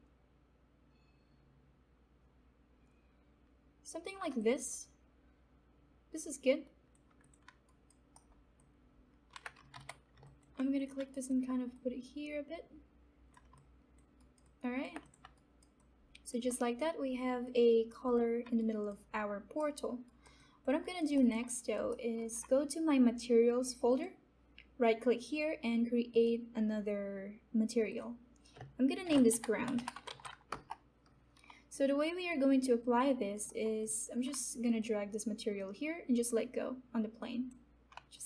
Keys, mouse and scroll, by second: 4.3-7.2 alt+drag, 7.6 alt+right click, 8.1 alt+middle click, 8.8 alt+click, 9.3-10.2 typing, 10.2-13.8 alt+drag, 13.8 alt+click, 14.2 alt+right click, 14.4 alt+click, 15.3 alt+right click, 15.7-17.4 alt+drag, 18.5 alt+right click, 19.6 alt+middle click, 20.0 alt+right click, 20.3 alt+click, 21.1 alt+middle click, 21.5 alt+right click, 21.8 alt+middle click, 23.9 click, 25.0 right click, 26.1 click, 28.7-30.5 typing, 31.7 alt+click.